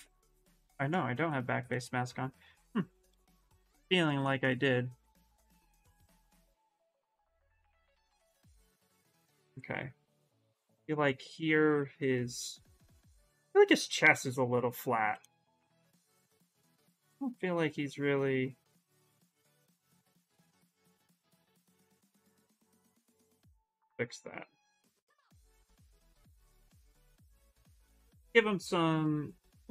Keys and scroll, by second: 7.8 s, 8.9 s, 12.1 s, 13.7 s, 21.7 s, 22.7 s, 25.6-26.7 typing.